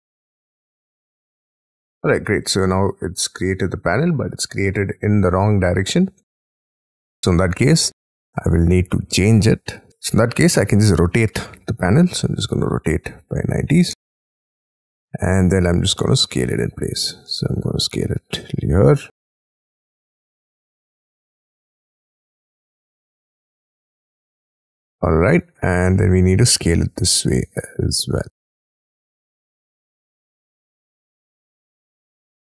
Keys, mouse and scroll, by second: 0.3-1.1 scroll down 19, 1.3 scroll up 1, 1.4 middle click, 4.2-5.2 scroll up 19, 5.6-6.1 scroll up 12, 6.6 scroll down 7, 7.6 middle click, 9.8 scroll up 1, 9.9 scroll down 5, 10.6 q, 12.1 double click, 13.3 9, 13.6 0, 13.9 Return, 14.6-15.4 scroll down 11, 15.5 s, 17.0 scroll up 6, 17.3 middle click, 18.2-18.6 scroll up 5, 25.0 middle click, 25.5 scroll down 5, 25.9 middle click, 26.4 scroll up 5, 26.7 s.